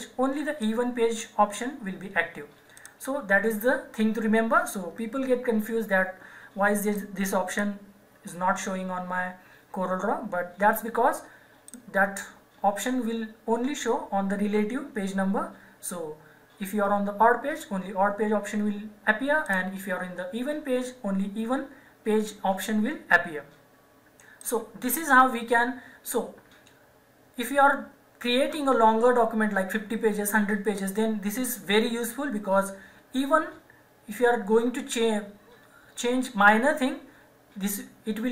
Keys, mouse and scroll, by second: 0.6 click, 6.9 click, 11.7 click, 19.4 click, 24.4 click.